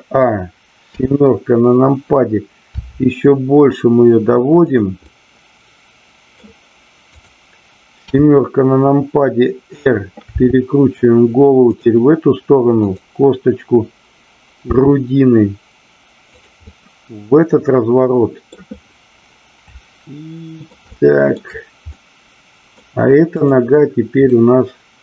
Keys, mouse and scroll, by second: 0.9 KP_7, 2.6 r, 4.6 click, 5.1-6.5 middle drag, 7.2 click, 8.0 KP_7, 10.3 r, 11.7 drag, 14.7 r, 16.3 click, 16.7-18.6 middle drag, 19.6 middle click, 20.9 shift+middle click, 21.8 middle click, 24.6-25.0 middle drag.